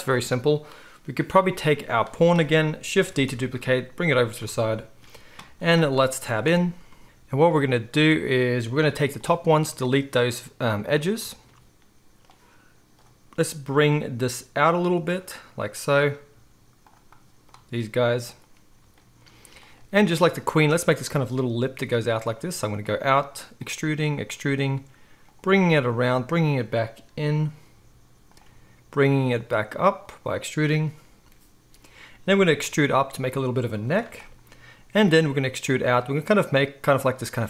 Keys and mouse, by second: 0.0-1.9 right drag, 1.9 middle click, 2.0-6.8 right drag, 3.0 shift+d, 6.4 Tab, 6.8-7.4 shift+middle drag, 7.0 z, 7.4 right click, 7.4 z, 7.9-15.2 middle drag, 9.7 x, 12.9-15.2 drag, 12.9-15.3 right drag, 14.3 g, 15.3-16.9 middle drag, 16.3 g, 16.9 right click, 17.1-18.2 middle drag, 17.5 g, 18.2-19.6 right drag, 19.6-22.4 middle drag, 21.7-26.1 typing, 22.4-25.8 right drag, 25.8-37.4 drag, 28.4 e, 29.2 e, 32.6 e, 35.2-37.4 typing.